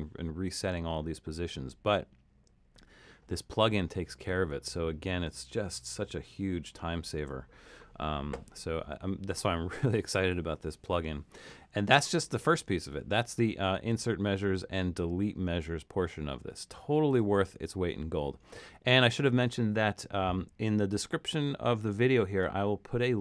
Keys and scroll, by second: 4.5 super+z, 6.0 super+-, 6.7 super+-, 7.2 super+-.